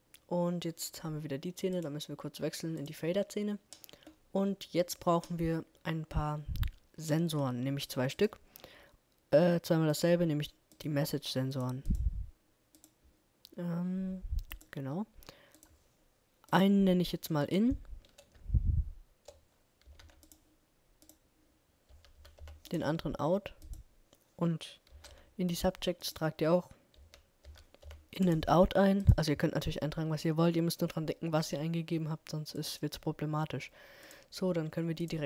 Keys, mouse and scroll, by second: 0.7-1.9 middle drag, 1.9-3.3 drag, 3.5-5.7 middle drag.